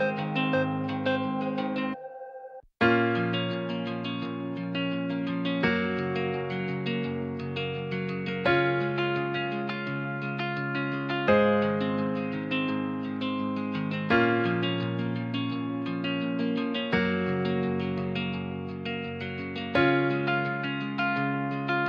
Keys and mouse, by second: 0.1 click, 0.9 middle click, 1.2-2.4 drag, 2.9 click, 7.7 click, 16.1 g, 16.2 z, 18.0 click, 19.2 s, 20.3 click.